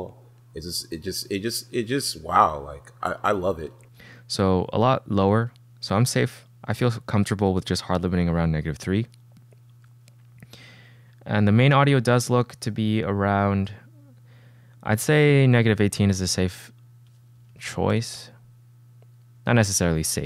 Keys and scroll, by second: 3.8 space, 5.5 g, 6.9-7.8 typing, 15.9 d, 17.2-18.3 typing.